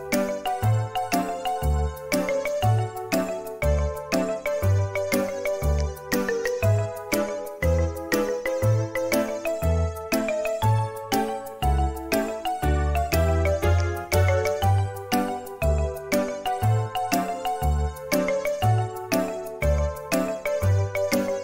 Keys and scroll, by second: 0.3 k, 9.5 Escape, 15.5 ctrl+c, 17.5 Escape, 18.7 ctrl+v, 20.6 space, 20.8 e.